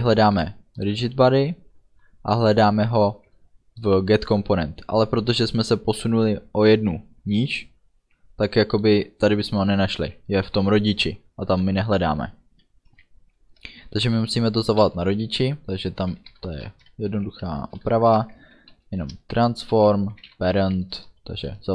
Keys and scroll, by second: 16.1 t, 16.2 r, 16.4 a, 16.6 n, 17.1 Left, 17.5 Right, 17.7 space, 17.8 Left, 18.3 ctrl+space, 19.2 Return, 19.8 ., 20.4 a, 20.6 r, 21.0 Return.